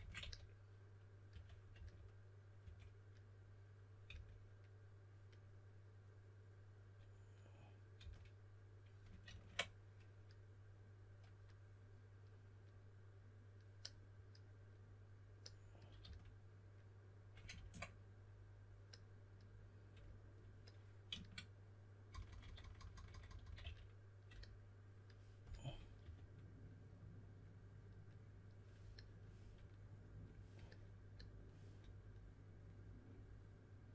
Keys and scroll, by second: 0.0-2.5 typing, 4.0 typing, 7.9 typing, 9.2 super+z, 16.0 s, 17.5 super+z, 22.0-23.5 typing, 25.4-26.4 typing.